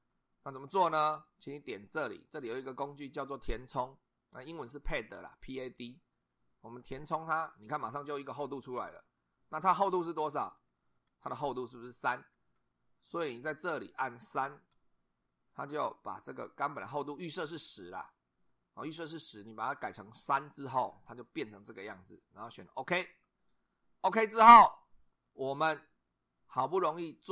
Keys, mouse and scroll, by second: 6.8 click, 12.3 2, 14.6 3, 23.2 click.